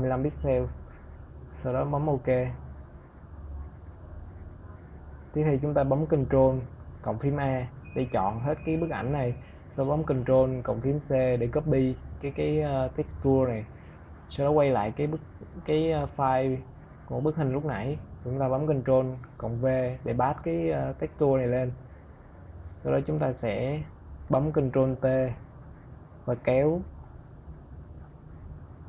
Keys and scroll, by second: 6.0 ctrl+a, 9.6 ctrl+c, 17.6 ctrl+v, 23.6 ctrl+t.